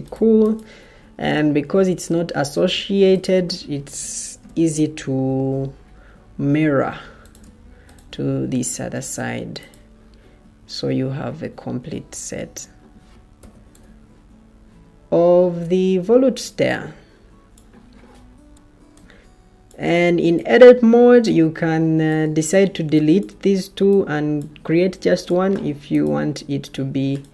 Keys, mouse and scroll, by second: 2.6 Escape, 8.7 Escape, 12.0 Escape, 13.3 o.